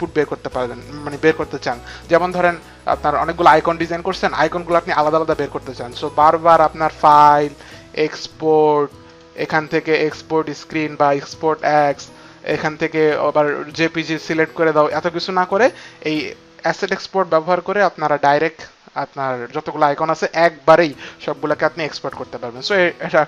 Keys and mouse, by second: 7.5 click, 9.0 click, 11.4 click, 13.3 click, 14.5 click, 15.4 click.